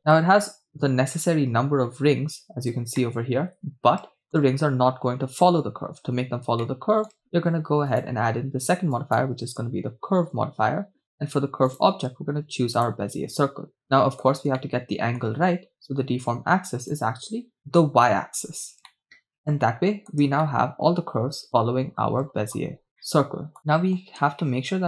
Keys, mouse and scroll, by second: 0.1-1.3 scroll down 5, 1.6-2.3 scroll down 2, 2.3-3.0 scroll up 3, 3.0-3.5 scroll up 1, 3.5-4.1 middle drag, 6.2-6.7 scroll up 3, 6.8 shift+middle click, 7.1-7.9 scroll up 2, 7.9-9.2 drag, 10.9-11.6 scroll down 2, 13.4 click, 14.2 middle drag, 14.6-15.2 shift+middle drag, 16.6 scroll up 2, 17.5-18.8 drag, 19.0-20.1 middle drag, 21.5 shift+middle click, 21.7-22.5 scroll up 5, 22.5-23.0 scroll down 5, 23.1-24.1 middle drag, 24.1 scroll up 1, 24.4 shift+middle click.